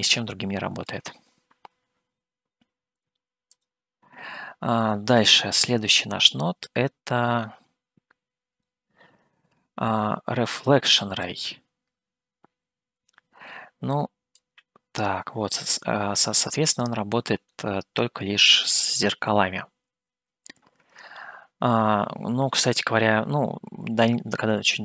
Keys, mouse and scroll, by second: 1.1 click, 3.8 click, 5.3-7.3 middle drag, 7.7-9.1 middle drag, 11.4-14.7 drag, 16.8 click, 17.8-24.8 middle drag.